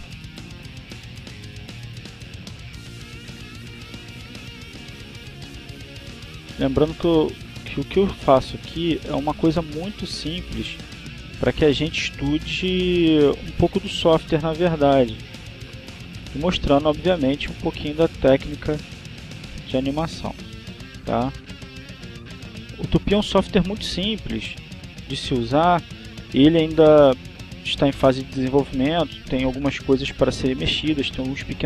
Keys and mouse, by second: 0.0-3.0 drag, 7.6 click, 9.8-11.5 drag, 12.7-13.7 drag, 15.0-17.1 drag, 18.2 click, 20.8-23.0 drag, 23.3 click, 24.6-26.5 drag, 26.8 click, 27.9-29.8 drag, 30.2-31.5 drag.